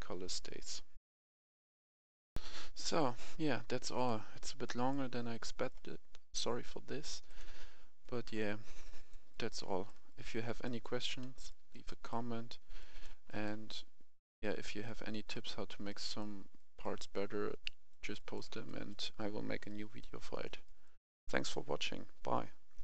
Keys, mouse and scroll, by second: 0.9 F11, 1.0 F10, 1.8 Escape, 2.3 F11, 2.3 F10, 4.0 click, 4.7 right click, 5.1-5.4 scroll down 1, 5.4 right click, 7.3 click, 8.0 right click, 8.5 scroll down 1, 8.8-11.2 right drag, 11.2 scroll down 1, 11.5-13.3 right drag, 14.1 scroll up 1, 14.8 right click, 15.5-15.9 scroll up 1, 15.9 right click, 17.2-17.6 scroll down 1, 17.6 right click, 19.2 scroll up 1, 19.7 right click.